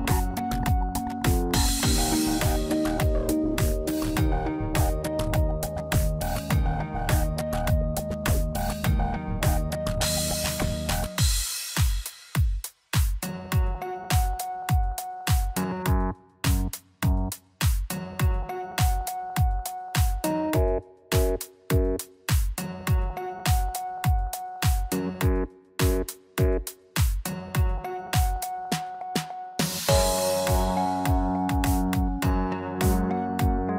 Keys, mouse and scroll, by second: 1.6 click, 2.9 ctrl+r, 5.6-6.0 scroll up 2, 6.7 ctrl+b, 9.3 x, 11.3 Tab, 12.7 click, 13.1 middle click, 13.6 Tab, 15.1 click, 15.5 middle click, 16.3 a, 18.5 i, 21.5 ctrl+i, 23.6 middle click, 23.9 scroll up 1, 24.5 scroll up 3, 25.1 ctrl+z, 26.6 click, 28.4 ctrl+i, 29.6 x, 31.9 click, 32.4 Tab, 32.7 scroll down 2, 33.0 middle click.